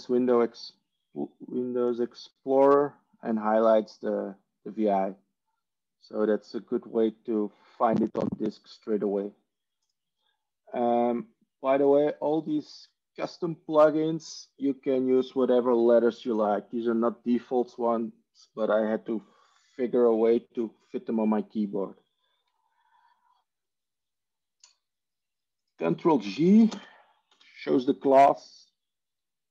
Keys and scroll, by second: 27.4 ctrl+space, 27.4 ctrl+g.